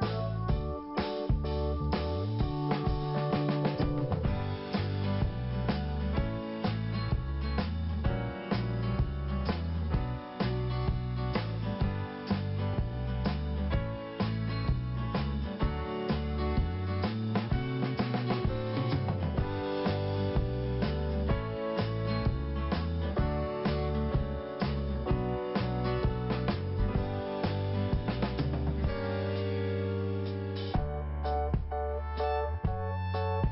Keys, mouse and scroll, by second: 0.0 click, 0.0 scroll up 1, 1.0 click, 1.0 click, 1.5 scroll up 1, 2.7 scroll up 1, 3.1 click, 3.2 click, 7.6 click, 9.2 p, 9.7 scroll down 1, 10.6 click, 11.7 scroll down 2, 12.6 click, 14.4 scroll up 2, 16.0 scroll down 2, 17.1 click, 18.0 scroll down 1, 18.8-19.1 scroll up 2, 20.3 click, 24.0-24.4 scroll up 1, 24.7 scroll down 1, 24.8 scroll up 1, 24.9 scroll down 1, 26.5 click, 28.2 click, 30.0 click, 31.3 scroll down 2, 32.8 click, 33.2 click.